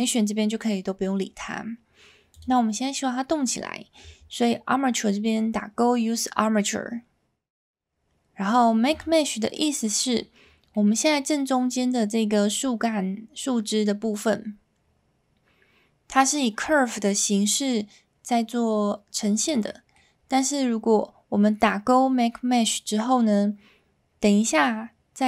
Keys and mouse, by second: 9.1 click, 10.7-11.1 middle drag, 19.6-19.9 middle drag.